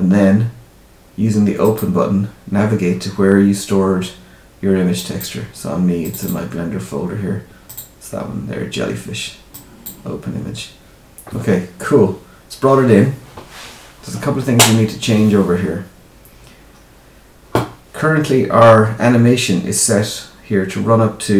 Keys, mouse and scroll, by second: 1.6 click, 15.1-15.6 scroll down 1, 16.6-19.6 scroll down 1.